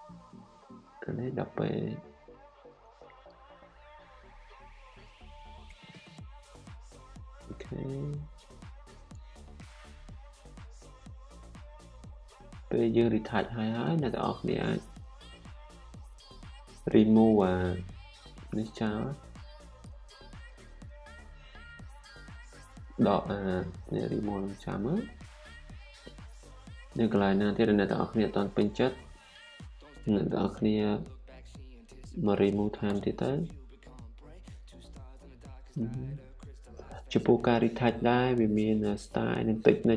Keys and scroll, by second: 8.3 ស, 20.3-21.0 typing, 25.1-25.5 typing, 28.6-31.2 typing.